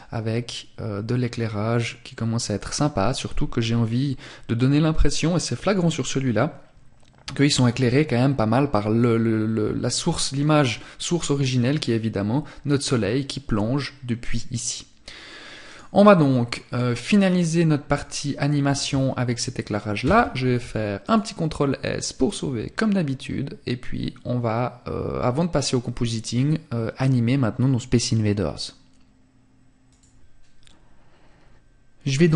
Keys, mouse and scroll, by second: 14.9 click, 31.5 click.